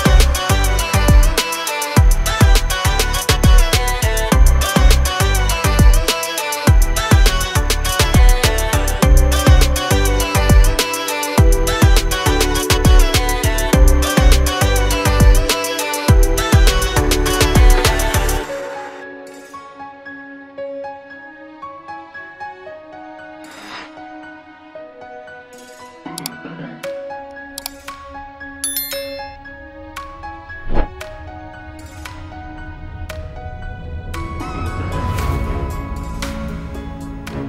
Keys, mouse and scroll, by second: 0.7 click, 2.3 shift+a, 6.0 click, 11.2 click, 11.6-12.1 scroll down 1, 12.5 click, 18.1-18.4 scroll up 1, 18.8 ctrl+click, 20.1 click, 21.8 click, 21.9 double click, 23.0 click, 26.0 double click, 29.1-29.5 scroll down 1, 29.5 click, 30.3-30.7 scroll up 1, 30.7-31.2 scroll down 1, 31.2-32.1 scroll up 1, 32.3 ctrl+click, 32.8 ctrl+click, 34.9-35.8 scroll down 1, 35.8 click, 36.3-36.7 scroll down 1, 36.7-37.0 scroll up 1, 37.0 click.